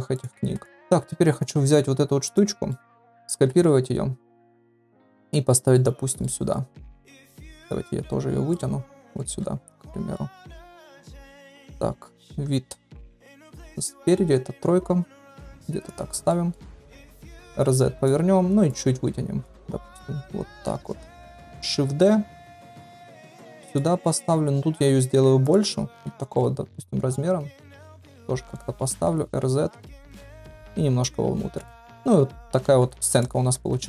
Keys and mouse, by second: 0.3-0.8 ctrl+a, 2.2 shift+click, 2.7 shift+drag, 3.6 shift+d, 5.4 shift+drag, 5.5 shift+middle drag, 6.2 middle click, 7.5-7.9 middle drag, 8.5 click, 9.4 KP_1, 10.1-10.5 middle drag, 10.8 middle click, 11.4 click, 12.0 KP_1, 12.8 KP_3, 13.8 shift+drag, 14.4 g, 16.2-16.6 middle drag, 17.2 r, 18.7 click, 19.8 KP_1, 20.7 KP_3, 21.2-21.6 shift+middle drag, 22.0 shift+d, 24.0 shift+middle drag, 24.7 s, 26.0 g, 28.2 middle drag, 28.9 r, 31.0 click, 31.7-32.0 middle drag, 32.7 ctrl+s, 33.1 click, 33.5 KP_0.